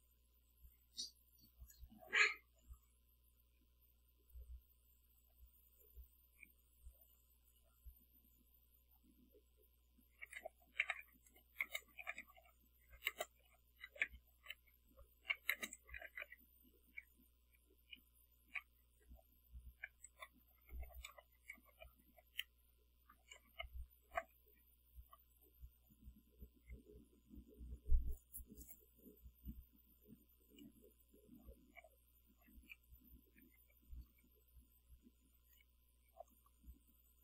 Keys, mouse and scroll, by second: 4.8 Return, 10.3-17.7 typing, 18.9-24.7 typing, 26.0 Left, 29.6 Right, 31.3 Delete, 31.9 0, 32.3 Right, 33.7 5, 34.0 Delete, 34.2 Left, 35.9 Delete, 36.2 0, 36.4 Left.